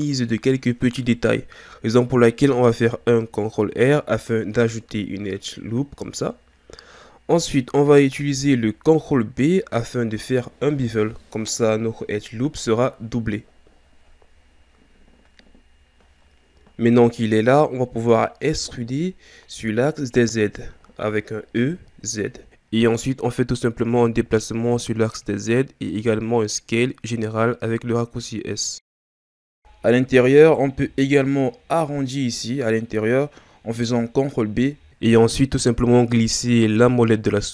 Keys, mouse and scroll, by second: 1.9-3.9 scroll up 1, 3.9 ctrl+r, 9.7 ctrl+r, 14.3 ctrl+b, 18.6-19.5 scroll up 2, 19.5 scroll down 2, 21.2 e, 27.7 Tab, 29.2 Tab, 30.4 alt+right click, 34.5 ctrl+b.